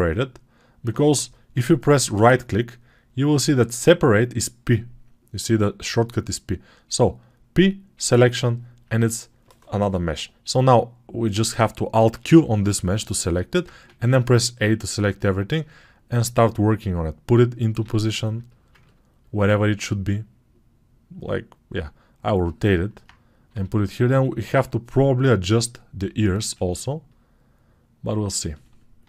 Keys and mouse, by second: 12.1 alt+q, 13.5-29.0 drag, 13.6 a, 14.4-18.2 right drag, 17.7 g, 21.5-25.6 right drag, 23.4 g.